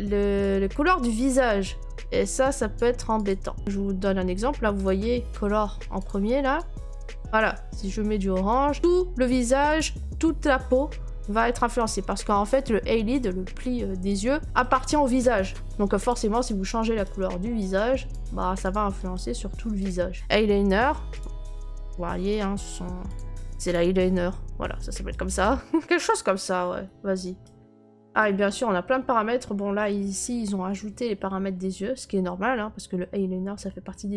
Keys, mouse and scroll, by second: 2.7 click, 3.3 click, 3.6 click, 4.8 click, 6.0 click, 8.8 click, 9.7 click, 10.2 scroll, 11.2-11.8 scroll, 11.8 right click, 11.9 scroll, 11.9 middle click, 12.0 middle click, 14.6 right click, 16.1 click, 18.1 click, 18.7 click, 19.1 right click, 19.9 click, 20.1 middle click, 21.2 click, 21.9 middle click, 21.9 middle click, 23.2 click, 23.7 click, 24.1 middle click, 24.1 middle click, 24.1 middle click, 25.1 right click, 25.5 middle click, 25.5 middle click, 25.6 middle click, 25.6 middle click, 25.8 click, 26.1 click, 26.6 middle click, 26.8 middle click, 27.4 right click, 27.9 middle click, 28.2 right click, 28.5 middle click, 28.5 middle click, 28.6 middle click, 28.6 middle click, 29.4 scroll, 31.0-32.0 scroll, 33.4 scroll.